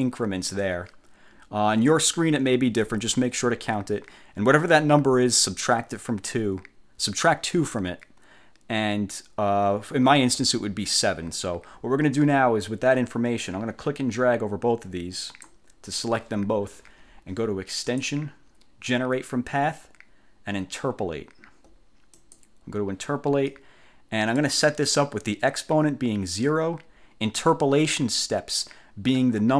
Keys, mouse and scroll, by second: 13.6-15.8 drag, 18.0 click, 22.2 click, 23.6 click.